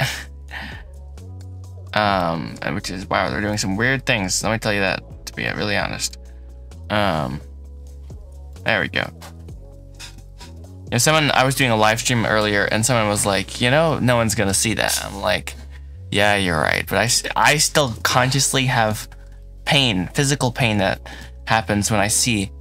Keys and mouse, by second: 2.0 middle click, 3.4 click, 3.8 middle click, 4.2 g, 5.2 Escape, 6.6 g, 8.3 click, 8.8 middle click, 9.2 Tab, 9.6 middle click, 10.1 shift+middle drag, 10.5-10.9 middle drag, 11.1-11.5 shift+middle drag, 12.2 middle click, 12.5 click, 13.7 click, 13.9 middle click, 17.0 shift+middle click, 17.6 shift+middle click, 18.7 shift+middle click, 20.0-21.2 middle drag, 20.5 Tab, 21.2 shift+z.